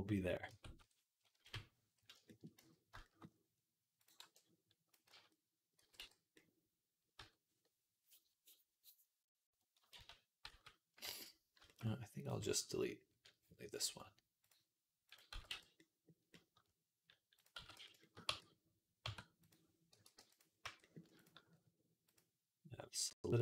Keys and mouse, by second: 0.3 Tab, 0.6 Tab, 1.2 KP_3, 2.1 shift+middle click, 2.4 z, 2.8-10.8 shift+right drag, 3.8 click, 4.0 b, 4.9 z, 5.6 x, 7.0 Tab, 9.8 ctrl+z, 10.3 ctrl+z, 10.8 click, 11.3-23.4 shift+right drag, 12.0 click, 14.3 click, 14.3 middle click, 15.1 x, 17.4 x, 18.1 Tab, 18.9 Tab, 19.3 click, 19.3 middle click, 19.8 l, 20.0 p, 20.5 Tab, 21.0 click, 21.0 middle click, 22.0-23.4 drag, 22.0-23.4 middle drag.